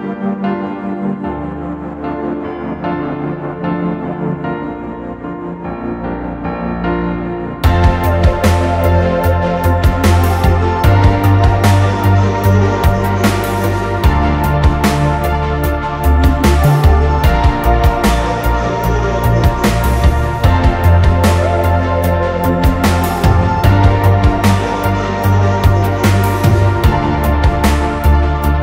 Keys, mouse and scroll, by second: 1.4 Return, 17.7-18.8 typing, 20.1 typing, 27.3 double click.